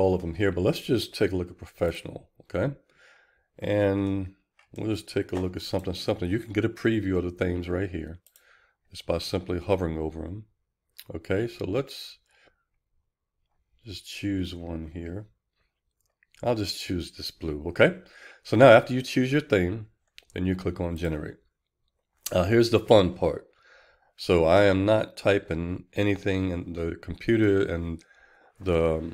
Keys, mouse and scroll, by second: 21.2 click, 21.4 click, 22.1 click, 23.1 click, 26.2 click.